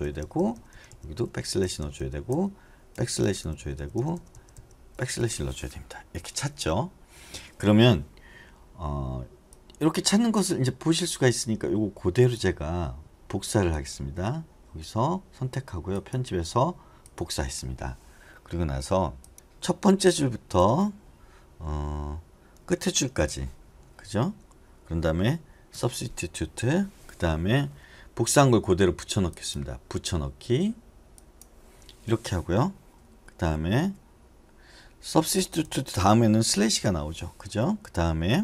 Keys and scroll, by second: 0.0 Right, 0.2 Right, 0.5 Right, 0.7 Right, 1.2 ₩, 1.8 Right, 2.9 ₩, 3.4 Right, 3.9 Right, 4.3 Right, 4.5 Right, 6.1 Right, 19.3-20.6 typing, 22.9 typing, 25.7 s, 33.4 BackSpace, 33.8 BackSpace, 34.1-35.4 Left, 35.6 Left, 37.7-38.3 Right.